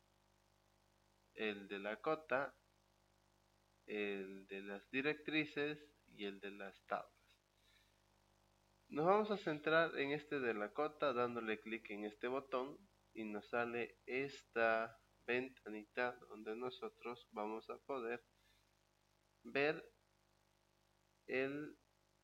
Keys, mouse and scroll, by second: 11.9 click.